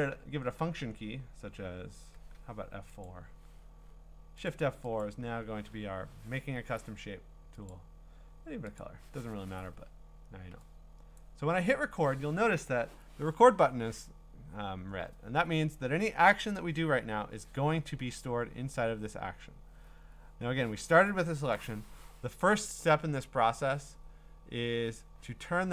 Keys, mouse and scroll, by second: 1.6 click, 3.1 click, 4.5 click, 5.0 click, 7.7 click, 8.8 click, 11.2 click, 18.7-21.8 middle drag.